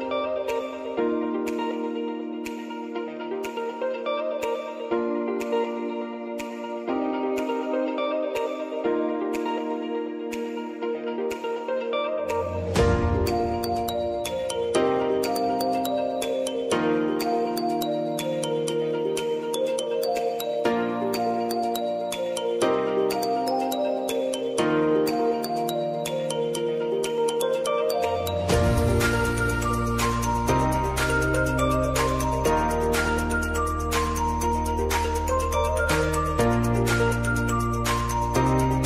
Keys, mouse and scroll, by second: 0.1 Up, 1.0 click, 6.1 click, 7.0 p, 7.8 click, 8.4 t, 8.9 click, 9.7 u, 10.5 click, 12.0 j, 12.9-14.4 drag, 14.9 Return, 15.8 click, 16.6 F9, 17.5-20.9 drag, 20.9 click, 21.2 space, 21.3 -, 22.3 space, 23.1 click, 23.5 space, 25.1 click, 25.5 space, 26.8 click, 28.6 [, 30.7 click, 36.4 p, 37.2 click, 37.5 space.